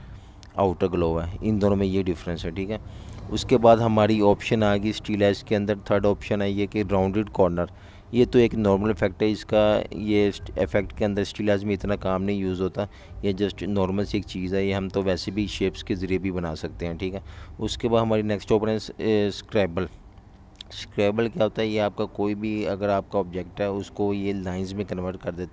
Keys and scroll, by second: 0.4 v, 1.5 Delete, 5.1 v, 12.5 v, 13.9-15.1 typing.